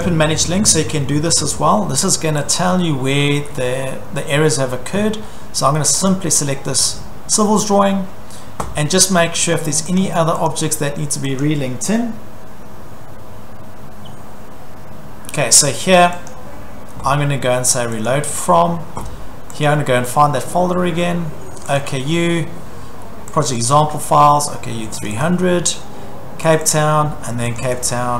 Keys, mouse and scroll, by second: 0.0 click, 2.6 click, 6.1 click, 10.5 click, 11.4 click, 16.3 click, 18.1 click, 19.7 click, 21.7 click, 23.4 click, 23.6 click, 25.1 click, 25.2 click, 26.6 click, 26.7 click, 27.6 click, 27.7 click.